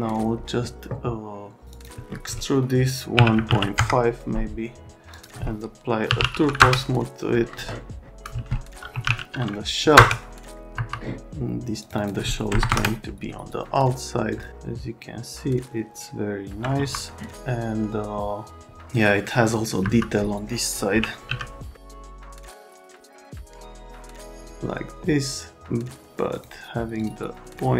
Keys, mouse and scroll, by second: 1.7 click, 3.1 KP_1, 3.3 KP_Decimal, 3.5 KP_5, 3.7 KP_Enter, 5.8-6.6 typing, 8.2 click, 8.7-9.5 typing, 9.9 Return, 10.7 F3, 11.8 click, 12.0 click, 12.6 KP_0, 12.7 KP_Enter, 14.3 click, 14.5 alt+middle click, 16.8 F3, 19.8 F3, 21.0 l, 21.8 F3, 23.7 click, 27.0 click.